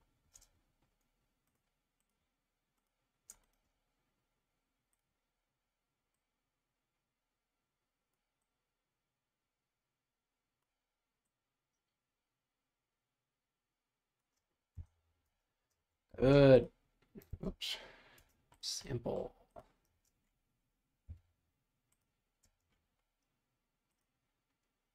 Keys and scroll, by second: 14.7 Return, 15.2 space, 16.1 b, 17.3 super+z, 19.9 space, 21.1 b, 22.4 space.